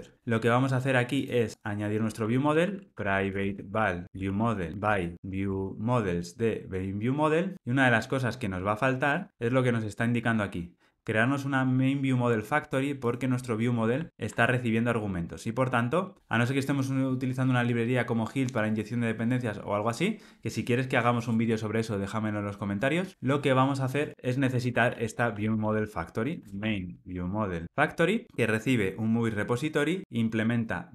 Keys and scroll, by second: 7.5 Tab, 8.4 alt+Return, 14.1 super+b, 28.2 Tab, 30.0 alt+Return.